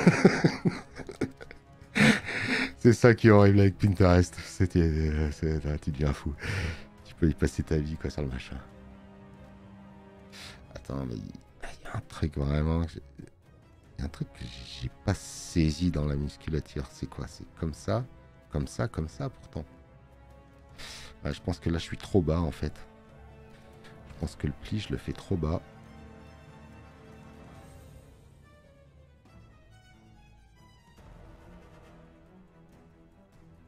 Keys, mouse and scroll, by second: 0.1 space, 0.3 click.